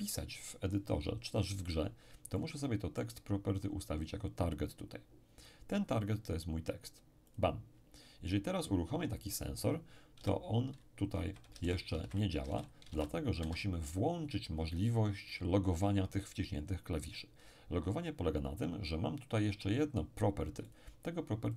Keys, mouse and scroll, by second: 2.3-4.0 middle drag, 6.0 click, 7.3 click, 10.2-12.9 typing, 13.4 Escape, 20.7 click.